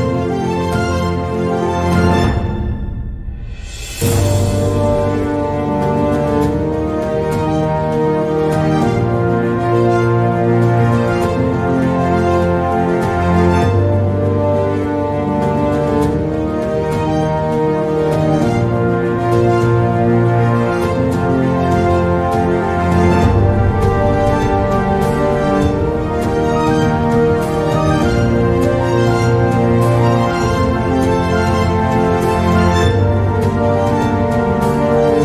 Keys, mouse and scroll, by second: 16.0 click, 16.9 Tab, 17.7 Delete, 18.3 shift+a, 23.1 e, 28.4-29.7 drag, 30.5 drag, 31.3 Tab, 31.9 e, 35.1 s.